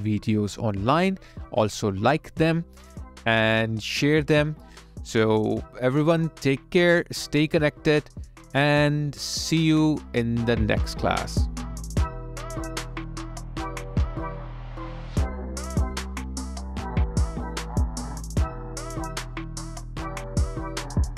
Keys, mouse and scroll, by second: 7.2 alt+middle click, 7.9 alt+click.